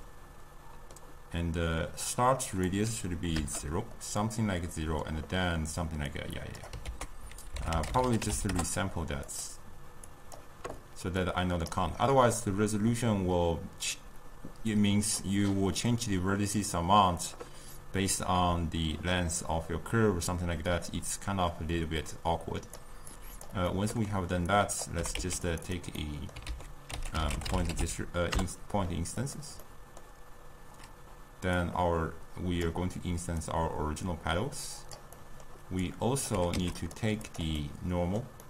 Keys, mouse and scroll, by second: 3.4 click, 4.3-9.4 middle drag, 9.4 ctrl+a, 20.9-29.3 drag, 29.3 ctrl+a, 32.7-38.4 drag.